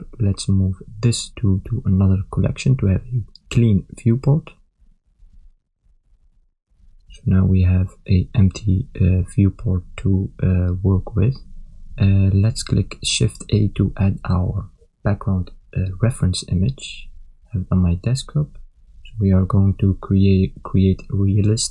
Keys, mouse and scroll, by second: 1.3 shift+click, 2.4 m, 6.6 Return, 9.2 click, 10.7 click, 13.5 shift+a.